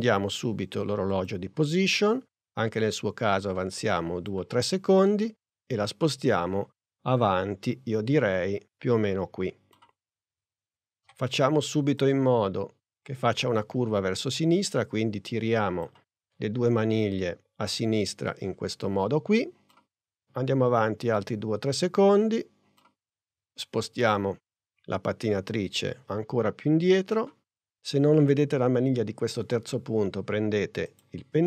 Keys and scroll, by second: 11.0 v.